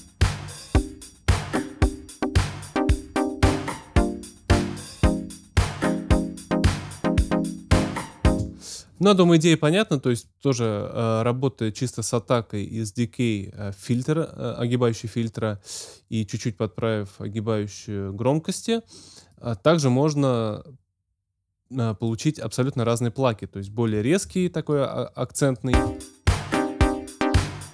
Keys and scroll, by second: 8.2 space, 25.7 space.